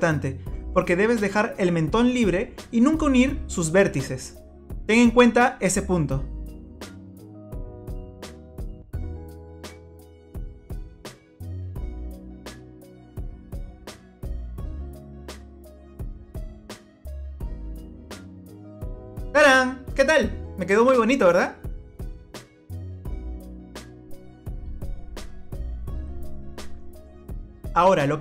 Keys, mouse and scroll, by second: 0.2 f, 0.9 middle click, 2.2-3.2 scroll up 4, 3.3 scroll down 3, 3.6 middle click, 6.6 click, 7.4 shift+click, 8.8 f, 9.3 click, 9.7 click, 10.1 shift+click, 10.7 shift+click, 11.3 f, 11.5-13.4 scroll up 17, 13.0 click, 13.6 shift+click, 14.0 click, 14.6 f, 14.8 click, 14.9-15.6 scroll down 27, 16.7 scroll down 1, 17.1 click, 17.5 scroll up 1, 18.4 middle click, 18.4 scroll up 4, 21.7 click, 22.9 scroll down 2, 23.5 scroll down 1, 24.6 scroll down 1, 25.2-25.6 scroll down 4, 25.6 middle click.